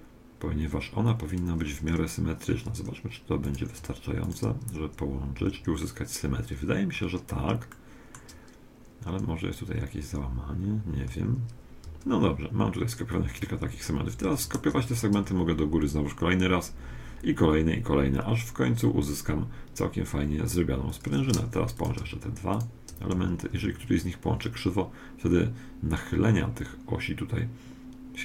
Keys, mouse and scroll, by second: 3.4-6.2 right drag, 4.7 f, 5.4 a, 6.9-9.3 middle drag, 9.7-10.5 scroll up 1, 10.5-11.0 scroll up 1, 11.0-13.2 middle drag, 11.8 a, 13.2 scroll up 1, 13.4-14.2 scroll down 1, 14.2 middle click, 14.2 shift+d, 21.8-24.2 right drag, 23.2 f, 23.5 a.